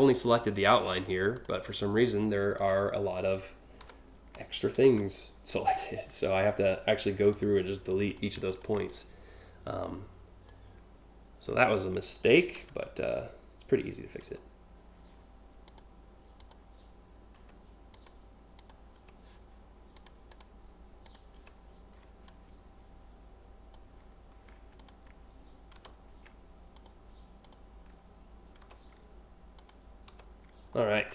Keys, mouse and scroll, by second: 0.9 click, 2.2 click, 3.4 Delete, 4.5 ctrl+v, 6.8 a, 6.9 click, 7.5 click, 8.1 ctrl+click, 8.5-10.1 drag, 12.2 Delete, 15.3 click, 16.0 click, 17.0 Delete, 17.5 click, 18.2 click, 18.6 Delete, 19.6 click, 19.9 click, 20.7 click, 21.8-23.3 drag, 24.4 shift+click, 25.4 Delete, 26.3 click, 27.1 click, 28.3 Delete, 29.3 click, 29.7 Delete, 30.4 scroll down 1.